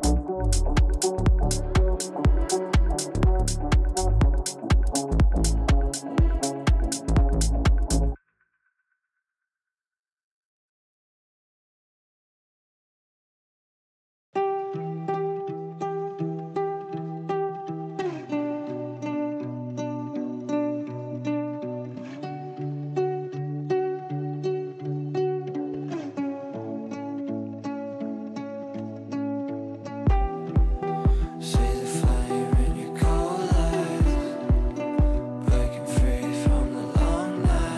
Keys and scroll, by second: 1.4 ctrl+r, 3.4 c, 12.0 Delete, 16.6 Delete, 27.4 g.